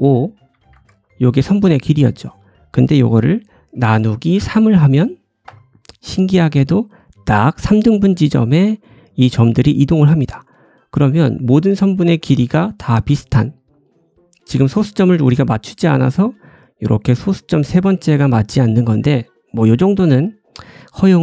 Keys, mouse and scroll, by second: 10.4-13.5 drag, 10.7 middle click, 11.7 2, 12.0 a, 12.6 middle click, 13.5 scroll up 1, 14.6 middle click, 20.1 click.